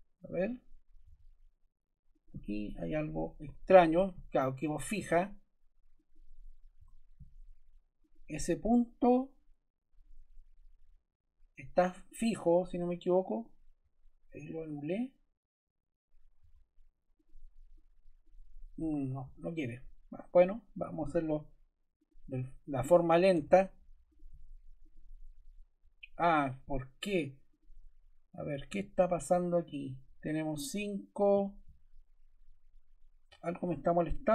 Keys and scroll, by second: 0.9 Escape, 3.4 5, 3.6 Return, 4.9 Escape, 6.7 BackSpace, 16.3 Escape, 18.7 BackSpace, 20.9 t, 23.3 d, 33.2 Escape, 34.2 l.